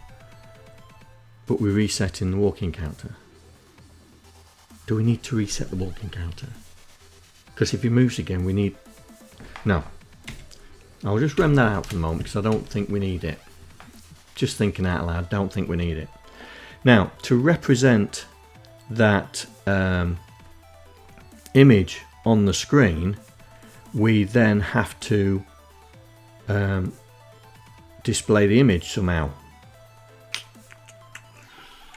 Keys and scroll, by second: 8.7 Home, 10.2 space, 10.5 Down, 10.9 Up, 31.5 Up, 31.7 Up.